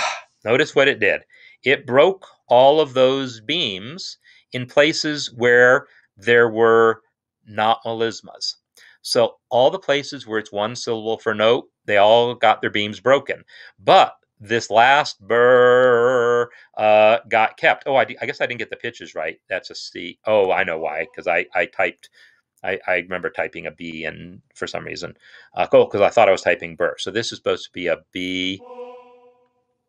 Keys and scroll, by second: 28.2 b, 29.7 typing.